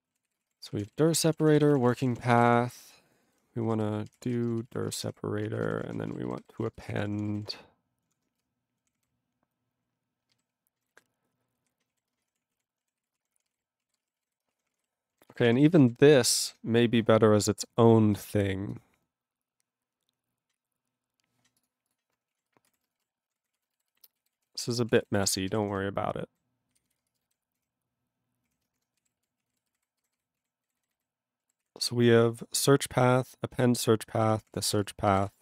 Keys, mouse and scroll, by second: 0.2 ctrl+s, 0.3 ctrl+space, 0.4 ctrl+a, 0.5 ctrl+p, 0.6 ctrl+p, 0.7 ctrl+p, 0.8 ctrl+g, 0.8 ctrl+e, 1.1 ctrl+a, 1.2 ctrl+space, 1.2 ctrl+e, 1.3 ctrl+n, 1.4 ctrl+e, 1.4 ctrl+n, 1.5 ctrl+e, 1.7 ctrl+n, 1.9 ctrl+e, 2.0 ctrl+n, 2.0 ctrl+e, 2.1 ctrl+n, 2.3 ctrl+g, 2.4 ctrl+e, 2.5 ctrl+p, 3.0 ctrl+e, 3.2 ctrl+b, 3.4-8.1 typing, 5.7 ctrl+a, 5.8 ctrl+o, 12.1 ctrl+space, 12.2 ctrl+n, 12.3 ctrl+w, 12.4 ctrl+p, 12.5 ctrl+e, 13.0 ctrl+s, 13.1 ctrl+space, 13.2 ctrl+p, 13.3 ctrl+p, 13.4 ctrl+g, 13.5 ctrl+e, 13.8 ctrl+a, 13.9 ctrl+space, 14.0 ctrl+e, 14.0 ctrl+n, 14.1 ctrl+e, 14.2 ctrl+g, 14.4 ctrl+space, 14.5 ctrl+a, 14.5 ctrl+p, 14.7 ctrl+p, 14.7 ctrl+g, 14.8 ctrl+e, 15.3 ctrl+s, 15.4 ctrl+a, 15.5 ctrl+space, 15.6 ctrl+e, 15.7 ctrl+n, 15.8 ctrl+n, 15.8 ctrl+e, 16.1 ctrl+g, 16.4 ctrl+s, 17.2 scroll down 2, 17.7 scroll down 1, 18.1 click, 18.7 click, 21.6 click, 21.6 click, 21.9 click, 21.9 click, 22.3 ctrl+a, 22.5 ctrl+space, 22.7 ctrl+n, 23.1 alt+w, 23.3 ctrl+p, 23.4 ctrl+y, 23.5 ctrl+p, 23.5 ctrl+e, 23.9 alt+b, 24.2 alt+b, 24.3 alt+d, 24.4-25.9 typing, 26.3 ctrl+n, 26.3 ctrl+n, 26.3 ctrl+n, 26.7 ctrl+f, 26.8 ctrl+f, 27.0 ctrl+space, 27.4 ctrl+alt+b, 28.1 ctrl+>, 28.5 ctrl+>, 28.8-30.3 typing, 30.4 ctrl+a, 30.6 ctrl+n, 30.8 ctrl+n, 30.9 ctrl+n, 31.7 ctrl+s, 34.4 ctrl+p, 34.5 ctrl+p, 34.5 ctrl+e, 34.7 ctrl+space, 35.1 ctrl+g, 35.1 ctrl+e, 35.2 ctrl+n.